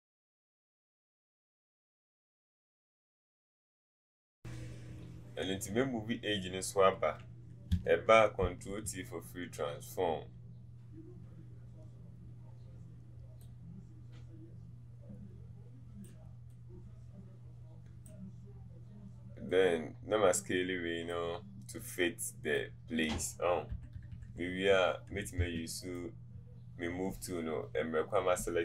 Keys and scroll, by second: 8.4 ctrl+t, 23.8 Left.